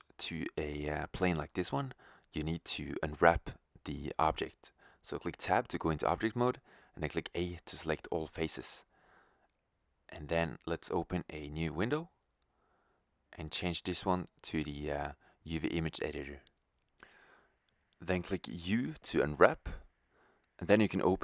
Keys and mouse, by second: 3.6 Tab, 4.6 middle click, 5.9 a, 6.9 a, 11.0 click, 15.0-21.2 middle drag, 17.9 u.